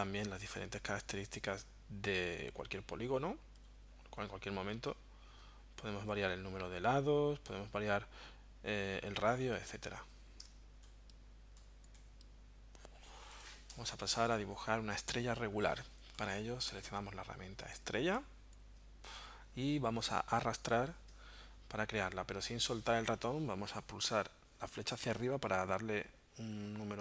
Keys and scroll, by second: 10.5 space.